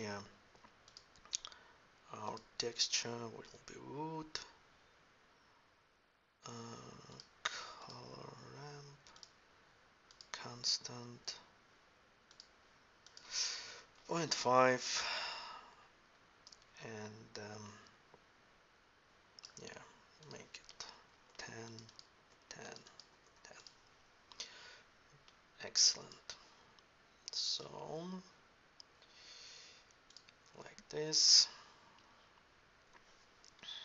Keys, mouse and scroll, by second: 6.9-10.9 middle drag, 12.1-14.8 middle drag.